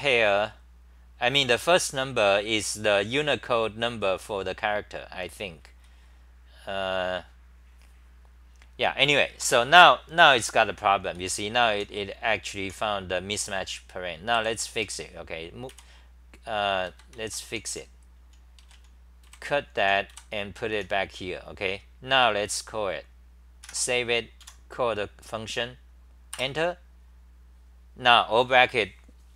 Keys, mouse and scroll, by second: 1.4 h, 1.7 n, 5.2 r, 5.4 r, 5.7 r, 11.2-12.6 typing, 14.3 y, 14.8 n, 15.7 x, 16.9 ctrl+g, 17.2 ctrl+g, 17.2-20.7 typing, 23.6 End, 24.4 a, 26.3 Return.